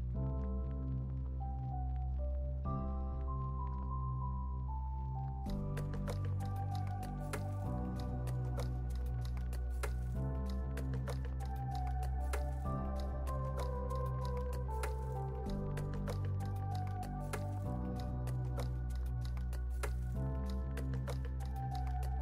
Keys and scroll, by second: 12.0 x.